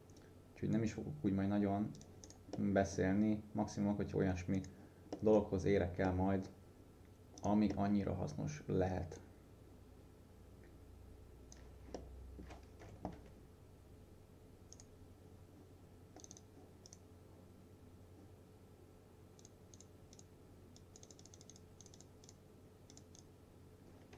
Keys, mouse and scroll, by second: 2.3 right click, 2.6 middle click, 2.8-4.6 scroll down 1, 4.6 click, 5.2 middle click, 5.4-5.8 scroll down 1, 5.8 scroll up 1, 6.1 middle click, 7.4 click, 7.8 middle click, 9.2-11.7 drag, 12.0-12.6 alt+middle click, 12.9 F4, 14.8 right click, 16.3 click, 16.9 right click, 19.5 click.